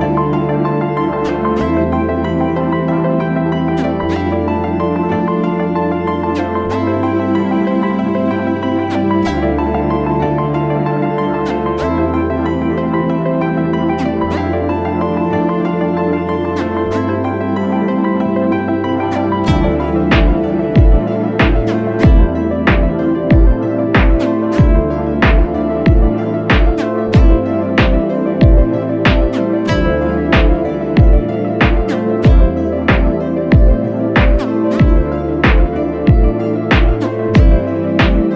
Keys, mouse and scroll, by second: 1.2 typing, 22.3 alt+click, 22.5 ctrl+click, 23.2 ctrl+click, 23.9 ctrl+click, 24.9 ctrl+click, 25.6 ctrl+click, 26.2 ctrl+click, 26.5 ctrl+click, 26.7 space, 27.5 ctrl+click, 27.6 ctrl+click, 28.1 space, 28.3 space, 28.6 right click, 29.3 space, 30.0 ctrl+click, 31.2 ctrl+click, 31.7 ctrl+click, 32.0 ctrl+click, 32.5 double click, 33.1 space, 33.6 ctrl+click, 34.8 ctrl+click, 35.0 space, 35.1 double click, 35.1 space, 36.7 ctrl+click, 37.6 ctrl+click.